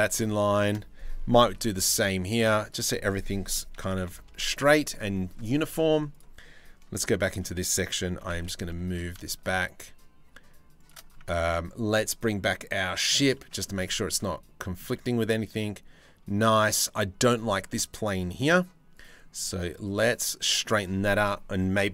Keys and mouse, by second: 1.2 c, 3.2 s, 6.6 c, 7.8 g, 11.0 Tab, 13.0 middle drag, 13.4 z, 13.9-14.4 middle drag, 14.5-16.1 middle drag, 17.3-18.0 middle drag, 19.7-20.2 middle drag.